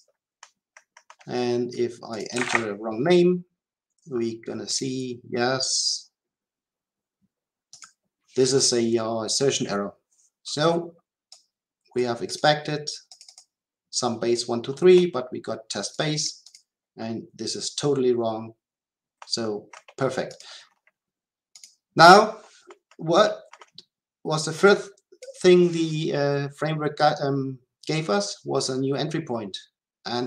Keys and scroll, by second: 4.7 shift+F10.